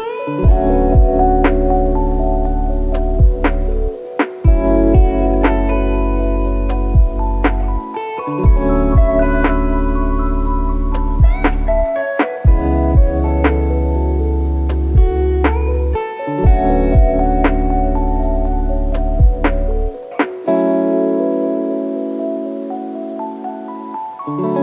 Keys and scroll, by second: 15.0 F1.